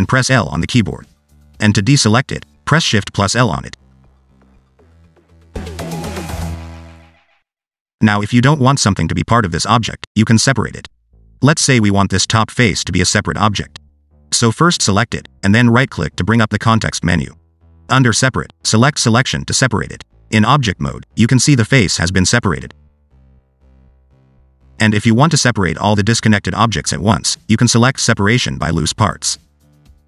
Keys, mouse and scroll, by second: 0.5 l, 4.2 shift+l, 5.6 l, 7.2 l, 9.0 3, 10.3 click, 16.3 right click, 21.4 Tab, 21.9 click, 22.3 g, 24.6 ctrl+z, 24.9 ctrl+z, 25.1 ctrl+z, 25.3 ctrl+z, 28.5 p, 29.7 Tab.